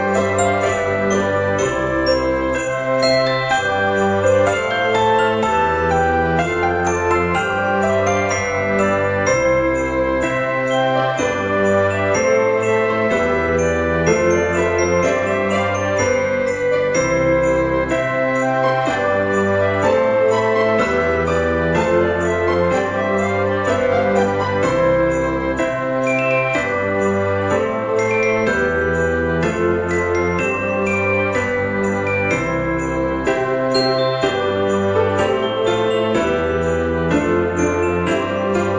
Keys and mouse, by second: 0.2 click, 1.4 click, 2.6 shift+click, 3.6 |, 6.6 click, 7.0 middle click, 8.1 e, 9.9 click, 10.1 a, 10.9 g, 11.9 y, 13.7 click, 15.2 shift+click, 15.8 middle click, 17.8 middle click, 18.7 click, 19.1 alt+shift+click, 20.6 alt+shift+click, 21.2 middle click, 21.7 alt+e, 22.6 click, 24.9 click, 25.9 ctrl+r, 26.2 click, 26.7 right click, 27.3 ctrl+r, 27.6 click, 28.0 right click, 29.4 alt+shift+click, 29.9 middle click, 31.0 ctrl+b, 35.6 click, 36.6 click.